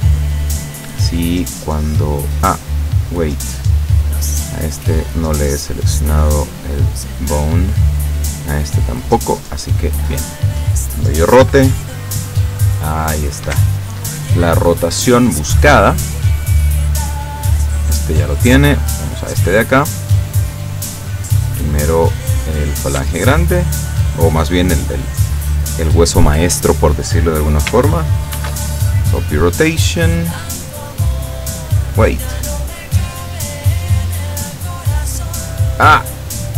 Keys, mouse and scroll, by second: 0.1 click, 1.1 right click, 2.8 right click, 5.1 click, 5.6 click, 6.3 right click, 7.9 right click, 9.0 click, 9.4 click, 10.1 right click, 11.5 r, 13.6 Escape, 14.9 scroll down 2, 15.4-17.2 middle drag, 17.9 right click, 18.9 right click, 19.5-21.2 middle drag, 21.6 middle click, 21.6 right click, 22.0-22.7 scroll up 2, 23.7 shift+right click, 28.4 ctrl+shift+c, 29.1 click, 32.5 right click, 33.7 right click, 34.8 right click.